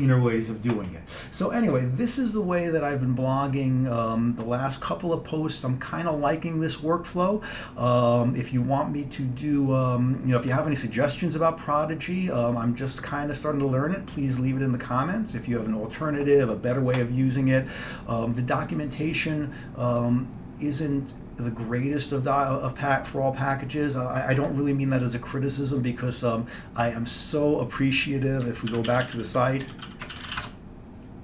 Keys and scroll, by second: 28.7-31.2 typing.